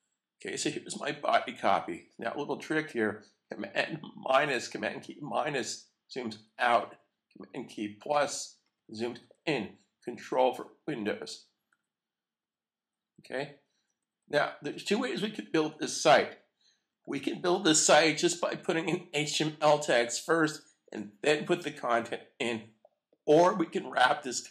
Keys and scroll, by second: 5.6 super+-, 6.3 super+-, 8.6 super+=, 9.2 super+=, 11.2 super+-, 11.7 super+-, 12.4 super+=, 13.2 super+-, 13.7 super+=, 16.0 super+-.